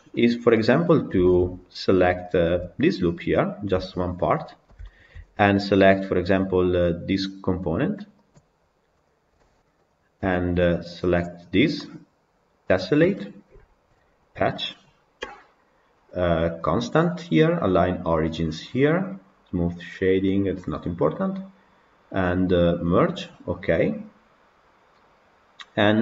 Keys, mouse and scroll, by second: 0.1-0.8 scroll down 6, 0.4 middle click, 1.1-2.3 shift+middle drag, 2.3 alt+click, 3.9 Tab, 4.1-4.7 scroll down 8, 4.7-8.2 shift+middle drag, 8.2 click, 9.0 click, 9.8 shift+click, 11.7-12.9 scroll up 1, 14.2-16.5 drag.